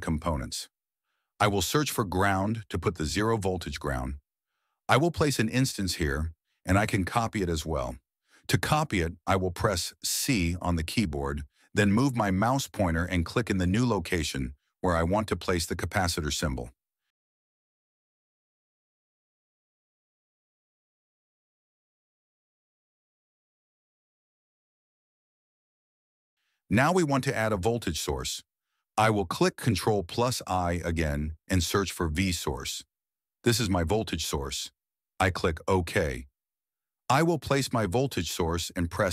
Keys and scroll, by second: 2.6-3.9 typing, 17.8 c, 30.4 ctrl+i, 32.4-34.5 typing, 38.3 m.